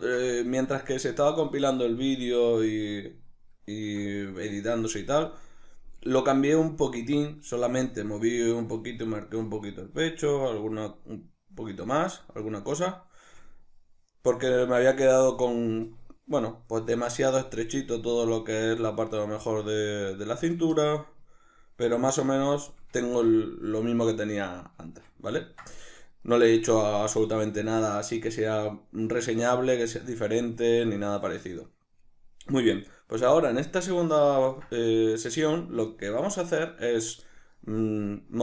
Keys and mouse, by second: 26.4 right click, 32.7-38.4 middle drag.